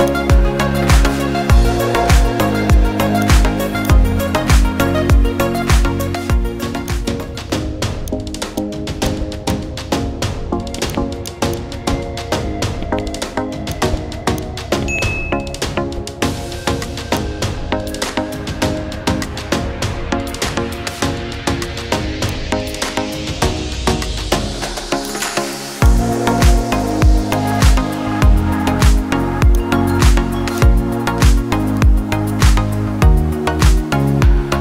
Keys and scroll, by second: 1.0-2.9 typing.